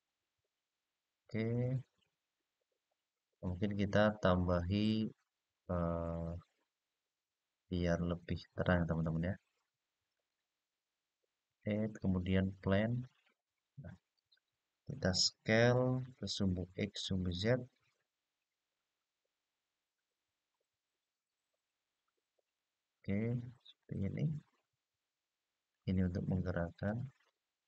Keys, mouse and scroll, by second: 1.5-2.0 scroll down 1, 2.1-2.5 scroll up 2, 2.5-4.4 scroll down 2, 4.4-4.8 scroll down 2, 5.5-8.2 scroll up 2, 9.9-12.8 drag, 17.2-21.5 s, 22.1 click, 22.9-25.0 scroll down 3, 25.4-26.6 drag, 27.4 click.